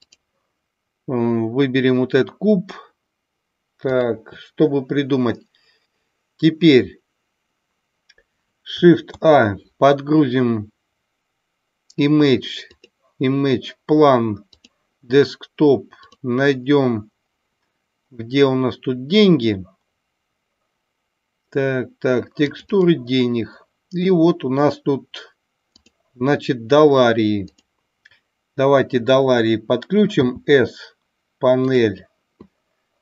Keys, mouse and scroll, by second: 9.0 shift+a.